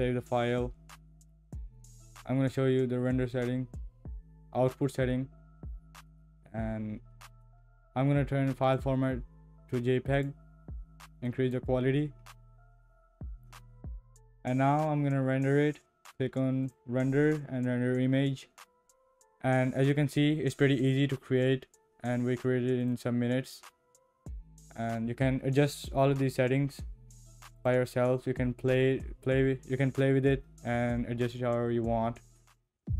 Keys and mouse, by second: 8.8-10.2 drag, 11.3 click, 13.8 ctrl+s, 16.7-18.9 drag, 22.8 click.